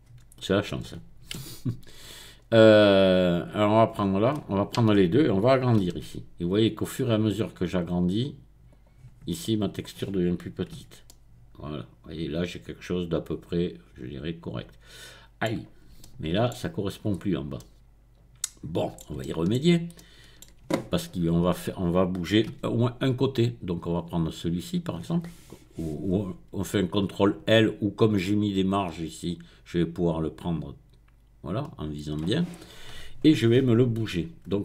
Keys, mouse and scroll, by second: 1.5 Tab, 2.2-3.1 scroll down 1, 3.1-4.3 drag, 4.3 middle click, 5.9 s, 8.7 click, 9.2 middle click, 10.0-10.8 scroll up 1, 10.7 Tab, 11.1-15.6 middle drag, 16.0 shift+middle click, 17.1-17.6 scroll up 2, 17.6-19.0 middle drag, 20.6-22.5 shift+middle drag, 22.7 Tab, 24.1 click, 29.3-32.1 drag.